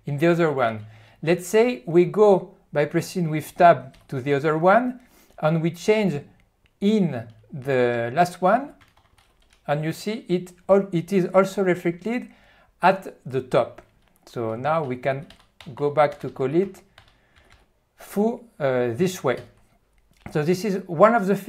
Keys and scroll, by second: 4.0 Tab, 9.0 ctrl+>, 9.1 ctrl+>, 15.4 ., 16.2 BackSpace, 17.0 ..